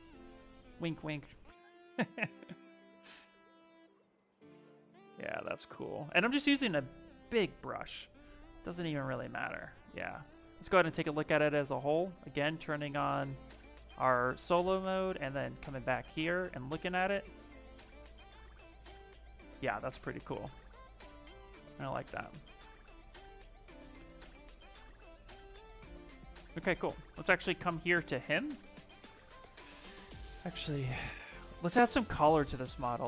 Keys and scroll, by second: 5.4 s, 27.4 shift+f, 27.7 shift+f, 31.6 shift+f.